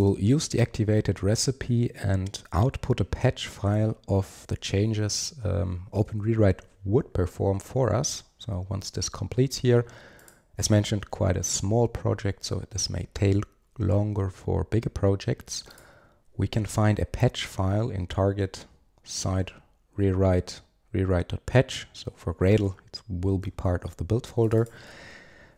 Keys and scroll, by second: 6.1 super+1.